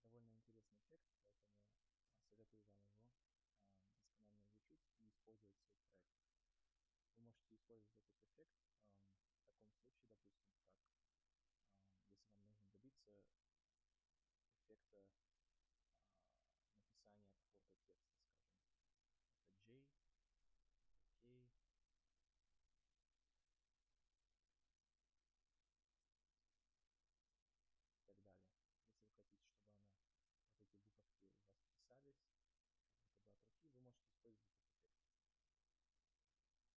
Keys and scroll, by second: 2.4 Delete, 35.8 Delete.